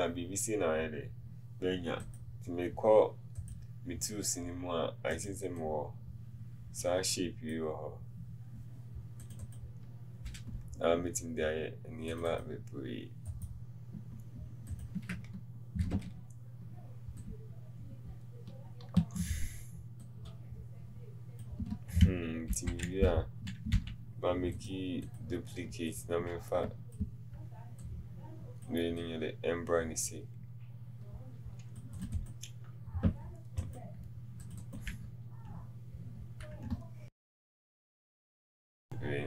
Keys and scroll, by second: 37.0 t, 37.4 KP_1.